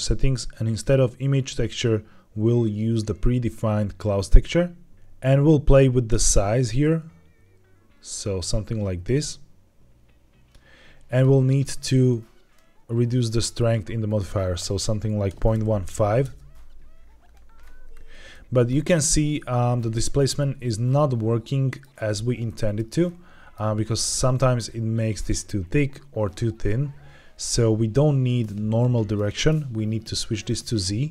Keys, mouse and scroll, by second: 0.7-4.4 drag, 6.1-10.4 drag, 11.2 click, 12.4-13.6 drag, 13.9-16.2 drag, 17.6-18.2 scroll up 2, 18.2-18.9 middle drag, 19.0-22.0 shift+middle drag, 22.0 scroll up 1, 22.3-22.8 shift+middle drag, 22.9 middle click, 29.0-31.1 drag.